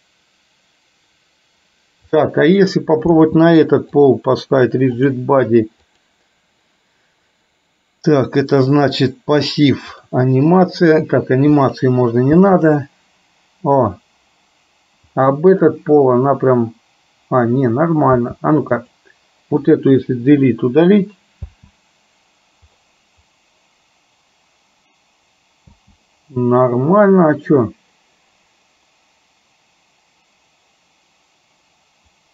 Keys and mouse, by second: 2.3 click, 5.2-6.2 drag, 10.0 click, 11.7 click, 12.3 space, 18.2 space, 19.0 click, 20.5 Delete, 21.5 space, 25.8 space.